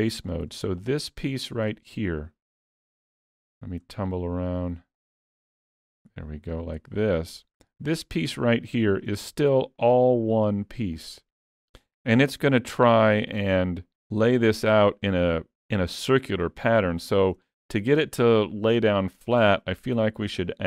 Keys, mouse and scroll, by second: 0.2 click, 0.8 shift+click, 1.3 shift+click, 2.7 shift+middle click, 3.4 middle click, 4.1 shift+click, 4.5 shift+click, 5.4 middle click, 6.5 ctrl+click, 7.2 ctrl+click, 7.7 middle click, 8.5-8.9 scroll down 1, 8.9 middle click, 9.8 shift+click, 11.0 shift+click, 11.4 shift+middle click, 12.4 middle click, 16.4 middle click, 17.4 middle click, 17.6 shift+middle click, 20.2 click, 20.2 2.